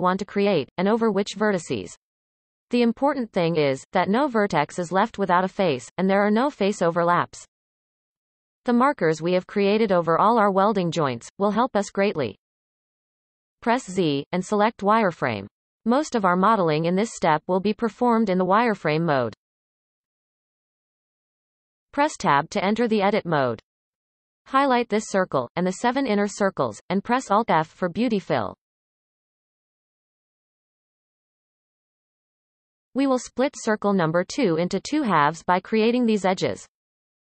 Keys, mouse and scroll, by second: 14.0 z, 21.3 Tab, 22.0-22.5 scroll up 1, 22.5-23.3 shift+middle drag, 23.3-24.4 scroll up 1, 24.4 alt+shift+click, 25.6 alt+shift+click, 26.3 alt+shift+click, 27.7 alt+shift+click, 28.4 alt+shift+click, 29.2 alt+shift+click, 29.9 alt+shift+click, 30.4 alt+shift+click, 32.1 alt+f, 33.4 shift+middle click, 34.1-36.0 scroll up 5, 36.0 click, 37.0 shift+click.